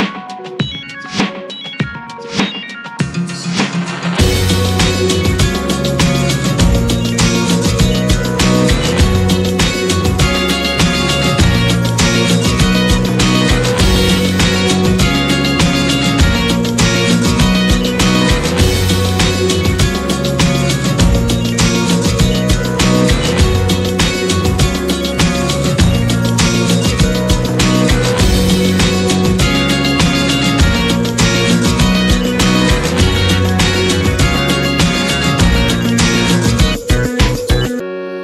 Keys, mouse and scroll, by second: 17.9-22.7 drag, 24.4-26.3 drag, 26.3-27.5 middle drag, 27.5 /, 28.1-29.0 middle drag, 29.0 scroll down 1, 29.2-34.9 middle drag, 34.9 click, 36.4 click, 37.4-38.2 drag.